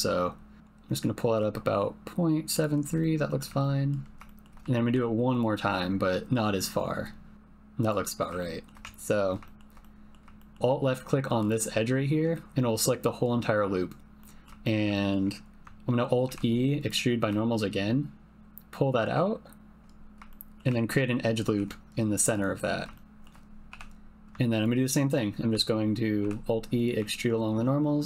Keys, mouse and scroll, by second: 3.0 middle click, 3.6 ctrl+middle click, 3.8 typing, 4.2 shift+middle click, 4.8 alt+e, 8.3 shift+click, 8.8 typing, 9.4 shift+middle click, 9.8 middle click, 10.2 typing, 10.3 shift+middle click, 10.6 alt+3, 11.4 click, 14.2 middle click, 14.6 shift+middle click, 14.9 ctrl+middle click, 16.2 alt+e, 20.3 shift+click, 20.4 shift+middle click, 20.6 shift+click, 20.6 typing, 21.4 ctrl+r, 22.9 shift+click, 23.7 3, 26.2 alt+e.